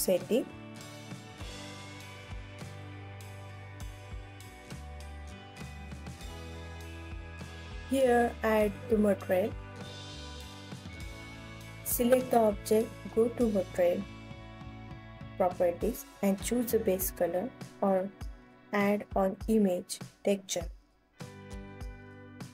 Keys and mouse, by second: 0.5 ctrl+s, 1.5-2.2 alt+drag, 2.5 ctrl+s, 3.1 click, 4.6 click, 7.4 ctrl+s, 9.1 click, 14.2-16.1 drag.